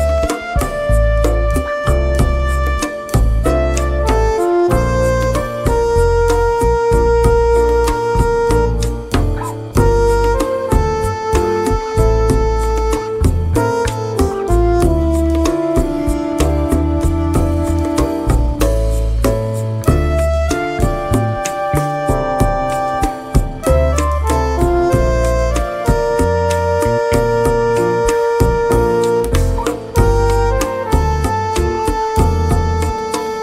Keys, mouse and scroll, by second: 1.1 ctrl+KP_Add, 3.4 ctrl+shift+g, 5.1 ctrl+KP_Add, 8.9 click, 10.1 click, 10.7 click, 12.1 click, 15.1 click, 24.1-28.1 drag, 32.7 click.